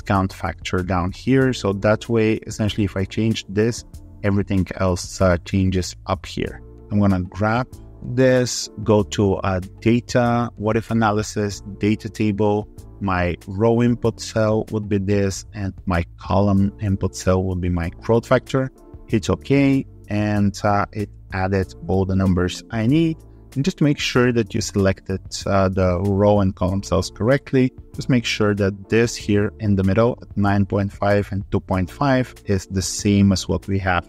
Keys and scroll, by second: 21.3 alt+2, 21.6 3.